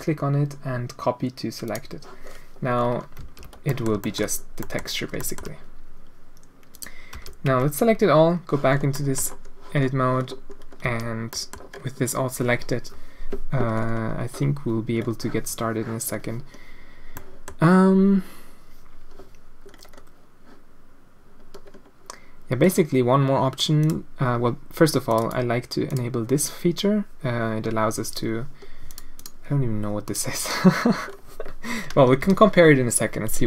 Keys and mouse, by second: 2.2 middle click, 3.2 alt+a, 3.6 drag, 3.8 middle drag, 4.0 shift+middle drag, 4.6 middle click, 5.2 shift+middle click, 5.3 shift+click, 6.7 click, 7.1 a, 8.5 Tab, 8.9 click, 10.8 a, 11.4 middle click, 17.3 middle click, 23.8 click, 25.3 click, 25.9 click, 28.9 click, 30.0 click, 32.2 a.